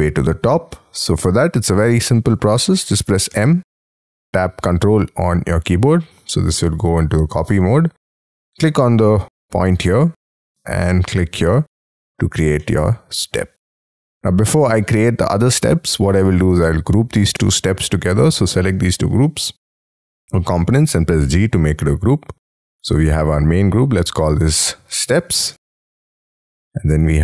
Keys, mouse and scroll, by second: 0.6-1.6 scroll up 22, 1.6 middle click, 8.0-8.5 scroll up 4, 11.8-12.6 scroll down 11, 12.6 middle click, 14.5 scroll down 5, 16.1 space, 16.4 scroll up 4, 18.3 ctrl+click, 21.2 g, 24.7-26.3 typing.